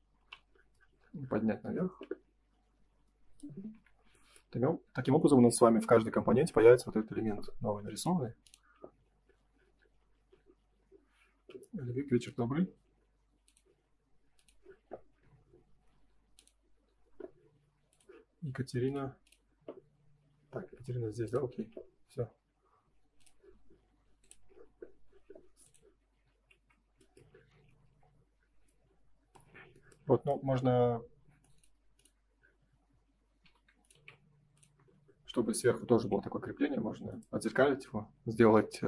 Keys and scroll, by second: 0.1 p, 3.5 space, 3.6 Escape, 5.4 ctrl+s, 26.5 ctrl+s, 27.6 Escape, 34.7 space, 35.9 ctrl+s.